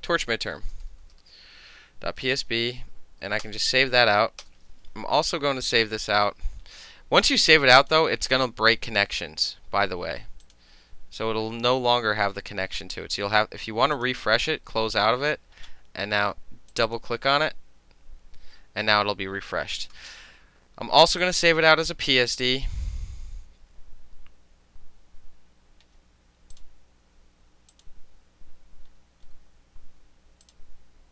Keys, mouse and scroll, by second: 0.0-2.0 typing, 3.5 Return, 4.5 Return, 5.5 ctrl+shift+s, 7.8 click, 10.5 click, 10.6-11.1 middle drag, 14.0 click, 16.8 click, 16.9 click, 20.0 ctrl+shift+s, 20.9 middle click, 21.3 click, 21.4-26.0 middle drag, 26.0 scroll down 1, 26.2-27.8 middle drag, 26.6 click, 27.8 click, 27.9-29.4 middle drag, 29.4 scroll up 1, 29.5-30.5 middle drag, 30.5 click, 30.6-31.1 middle drag.